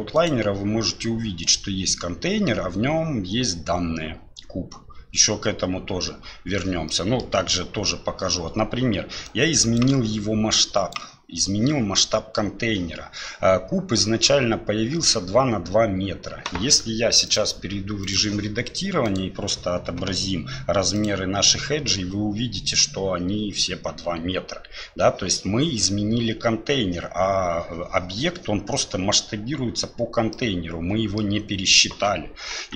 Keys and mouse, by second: 6.9 middle click, 9.3 click, 10.6 click, 17.3-18.1 drag, 19.1-21.4 drag, 30.4 middle click, 32.6 Tab.